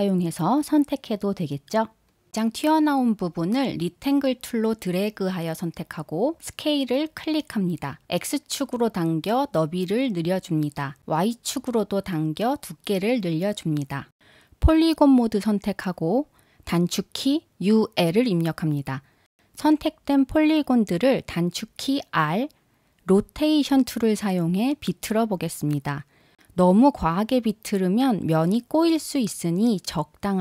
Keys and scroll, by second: 19.7 u, 20.4 l.